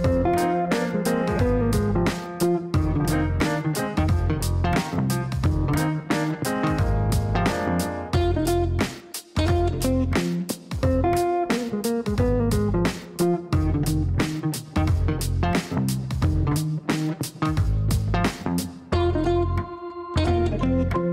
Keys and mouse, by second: 2.3 click, 3.3 KP_5, 3.4 KP_0, 3.7 KP_Enter, 8.0 click, 10.0 KP_5, 10.1 KP_0, 10.5 KP_Enter, 16.4 click, 17.8 KP_2, 17.9 KP_0, 18.0 KP_0, 18.2 KP_Enter.